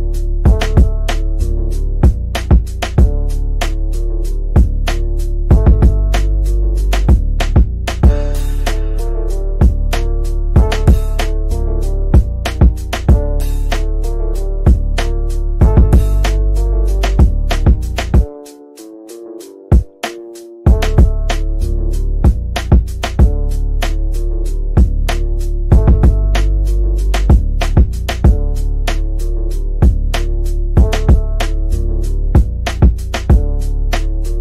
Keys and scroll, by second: 0.6 ctrl+z, 1.7 ctrl+z, 3.0 z, 18.2 F3.